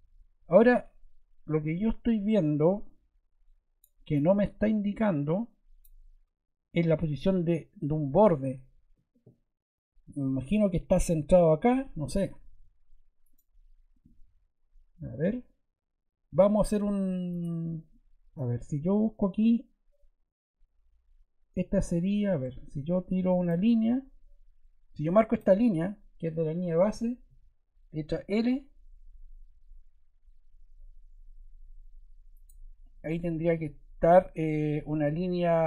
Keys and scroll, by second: 12.4 Escape, 14.1 Escape, 22.1 Escape, 28.0 l.